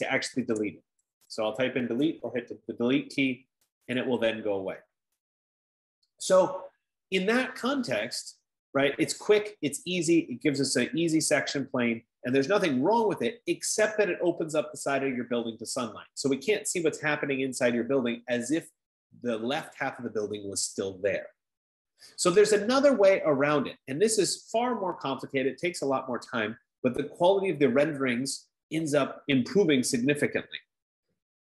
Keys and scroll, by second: 0.7-1.6 typing.